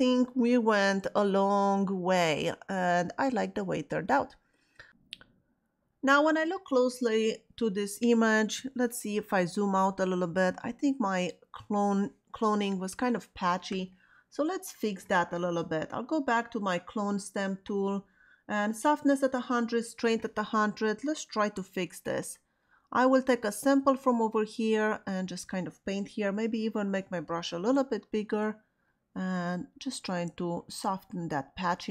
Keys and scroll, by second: 26.5 ].